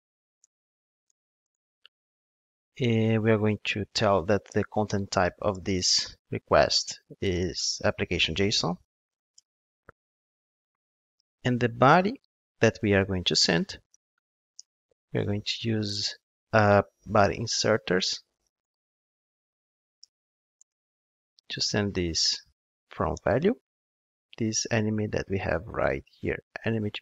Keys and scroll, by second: 5.0 super+z, 7.6 Return, 14.6 Return, 20.1 Return.